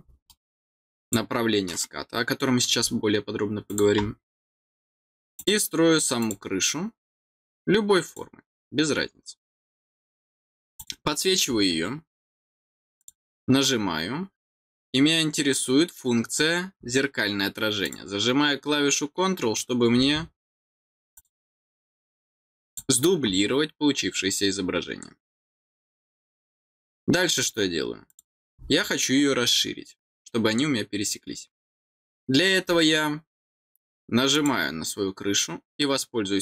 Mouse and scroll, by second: 0.3 middle click, 1.0 click, 3.7 click, 5.3 click, 6.2 click, 8.0 click, 10.8 click, 13.0 click, 17.8 click, 21.1 click, 22.6 click, 28.1 click, 34.3 click.